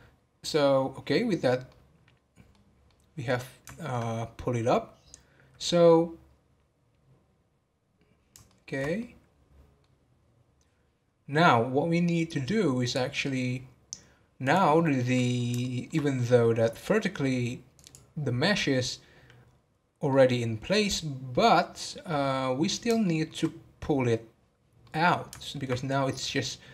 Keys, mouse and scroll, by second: 1.7-11.9 middle drag, 11.9 scroll down 3, 12.8 click, 15.6-16.5 shift+middle drag, 16.5 scroll up 3, 17.7-20.1 drag, 20.1-22.5 middle drag, 22.5 scroll down 2, 23.0-26.7 shift+middle drag.